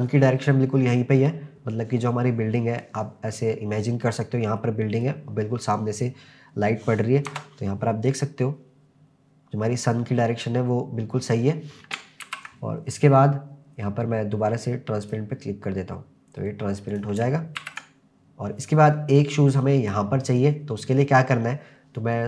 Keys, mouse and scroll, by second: 0.4-1.3 middle drag, 4.6-5.1 middle drag, 7.3 KP_0, 12.3 ctrl+s, 14.3-14.7 scroll down 2, 15.1 click, 16.9 click, 17.6 ctrl+s, 18.2-19.5 scroll up 1, 19.5 click.